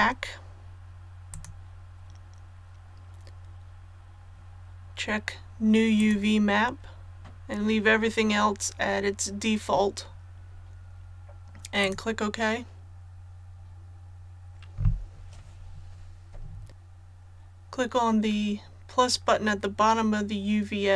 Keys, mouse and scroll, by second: 1.3-20.9 drag.